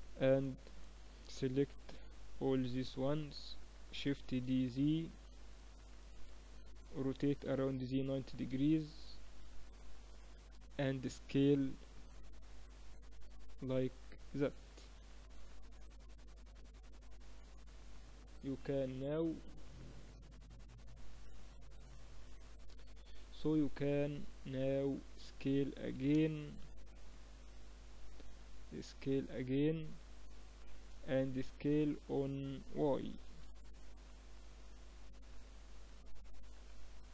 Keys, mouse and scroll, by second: 0.2 a, 1.2 b, 2.9-4.8 middle drag, 3.8 shift+d, 5.0-7.2 middle drag, 6.6 r, 9.0-10.8 drag, 11.0 s, 14.4 KP_7, 15.0-16.2 middle drag, 16.2 click, 16.6-22.9 middle drag, 25.4 s, 30.6-32.7 middle drag, 32.7 s, 36.2-37.1 middle drag.